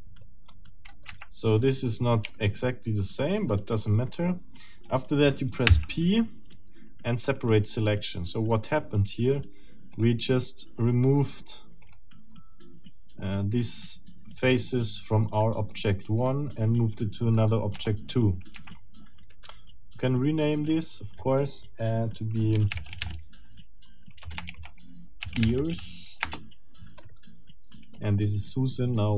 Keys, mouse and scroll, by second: 0.0-0.4 scroll down 2, 1.1 Escape, 1.5-1.9 scroll down 2, 2.3-3.7 shift+middle drag, 5.7 p, 7.2 click, 9.9 click, 11.8 click, 15.7 click, 16.9 click, 17.7 F2, 18.5 Escape, 19.3 right click, 20.6 click, 22.7 shift+e, 22.9 shift+a, 23.0 shift+r, 24.2-25.7 typing, 24.5 Caps_Lock, 26.3 Return, 27.9 click, 28.9 click.